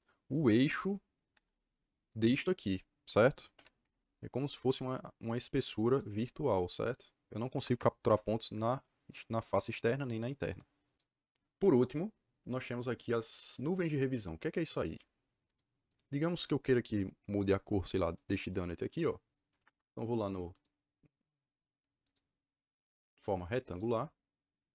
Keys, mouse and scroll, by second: 1.2 Escape, 3.5 l, 3.7 Return, 7.4 Escape, 7.6 Escape, 8.0 Return, 15.4 click, 19.6 Escape, 20.4 click, 22.0-23.7 drag.